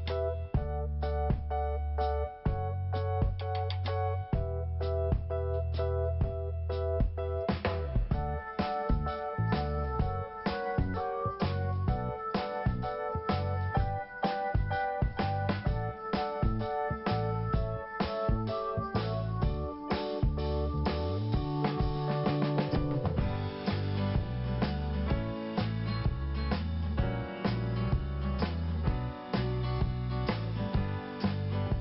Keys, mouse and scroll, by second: 0.7 click, 2.5 click, 5.4 scroll up 1, 6.5 click, 7.5 click, 8.2-8.5 scroll down 1, 9.2 click, 10.5 click, 11.5 click, 12.5 click, 14.4 p, 16.0 click, 17.5 i, 18.7 scroll up 1, 19.6 click, 22.0 click, 25.1 scroll down 2, 25.2 click, 25.7 scroll up 1, 26.9 click, 27.9 click, 28.7 click, 29.5 click, 31.0 click.